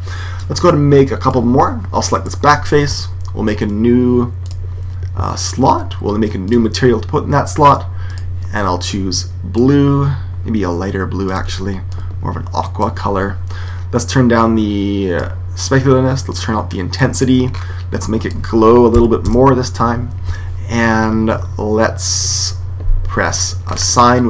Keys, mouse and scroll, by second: 2.0 right click, 4.3 click, 6.3-9.8 drag, 11.1 click, 14.0 click, 16.2-19.9 drag, 23.5-24.2 middle drag.